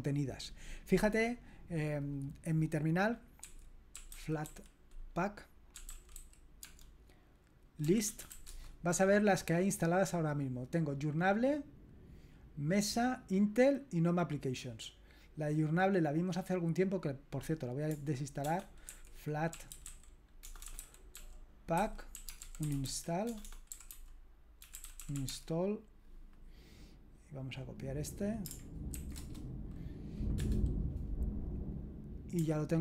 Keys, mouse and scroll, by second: 1.8 click, 3.4-8.8 typing, 17.9-25.8 typing, 27.5 click, 27.8 click, 28.9 ctrl+alt+v, 29.2 Return, 30.4 Return.